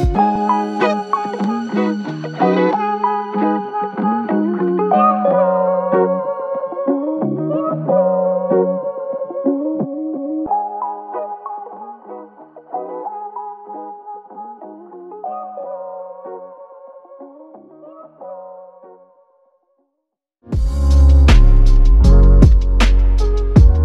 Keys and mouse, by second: 0.5 alt+click, 1.8 double click, 2.6 alt+click, 4.5 double click, 5.8 alt+click, 9.6 double click, 11.5 alt+click, 13.6 double click, 14.0 alt+click, 15.1 double click, 16.0 alt+click, 17.5 alt+click, 18.6 alt+click, 19.8 double click, 20.4 double click, 23.1 r.